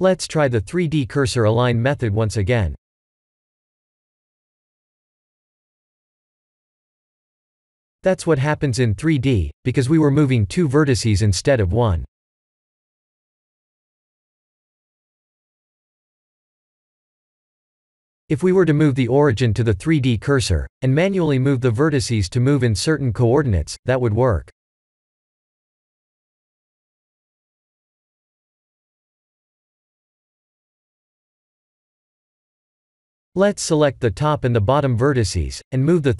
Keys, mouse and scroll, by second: 0.0 click, 1.4 shift+s, 6.3 middle click, 6.4 middle click, 8.2 middle click, 8.5 shift+middle click, 9.0 shift+z, 9.3 middle click, 10.2 middle click, 11.7 middle click, 13.2 middle click, 13.5 ctrl+z, 14.5 middle click, 16.6 middle click, 17.5 middle click, 20.0 KP_7, 23.6 n, 24.7 click, 26.8 click, 29.4 middle click, 33.1 KP_1, 33.5 KP_7, 35.3 1, 35.7 z.